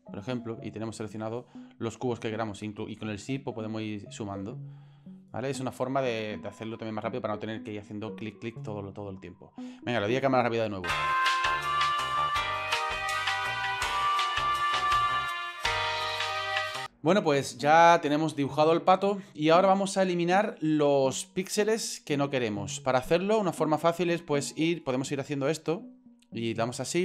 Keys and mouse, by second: 1.2-1.7 drag, 3.1-3.8 shift+drag, 4.2-4.5 shift+drag, 5.0-5.3 shift+drag, 8.7 click, 8.9 click, 10.5 right click, 11.2 shift+click, 11.3 shift+click, 11.3 ctrl+shift+z, 11.3 shift+click, 11.5 shift+click, 11.6 shift+middle click, 12.0 middle click, 12.3 shift+right click, 12.4 ctrl+l, 12.5 shift+middle click, 12.6 shift+middle click, 12.6 shift+KP_7, 12.7 ctrl+l, 12.8 shift+middle click, 13.1 ctrl+z, 13.2 click, 13.3 shift+right click, 15.0 ctrl+l, 15.1 shift+click, 15.2 ctrl+z, 15.5 shift+right click, 15.7 ctrl+shift+l, 15.8 shift+middle click, 16.2 ctrl+l, 16.5 shift+click, 16.6 ctrl+l, 16.7 shift+middle drag, 23.6-25.6 drag, 26.8-27.0 shift+drag.